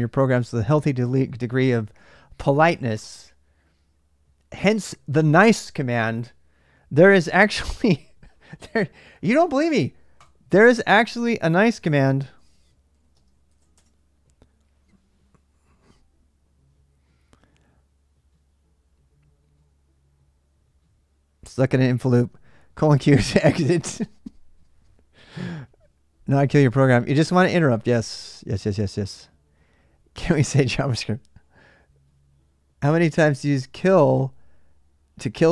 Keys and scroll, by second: 11.4-13.4 typing, 13.5 Return.